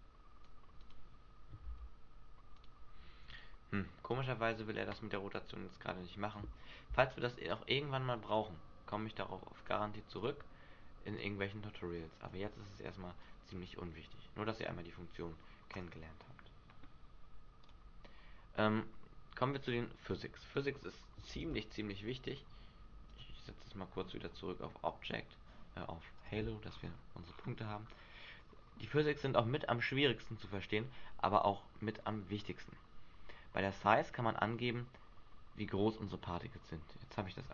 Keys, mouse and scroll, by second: 0.8 right click, 1.7 r, 2.6 right click, 3.3 right click, 7.5 click, 9.6 click, 12.7 click, 13.2 click, 15.7 click, 17.6 click, 19.7-20.5 scroll down 2, 20.5 right click, 20.5-21.1 scroll down 1, 21.3 Delete, 22.2 right click, 23.1 right click, 23.9 scroll down 1, 24.5 scroll down 3, 26.1 click, 26.6-27.8 scroll up 10, 28.1-28.9 scroll down 5.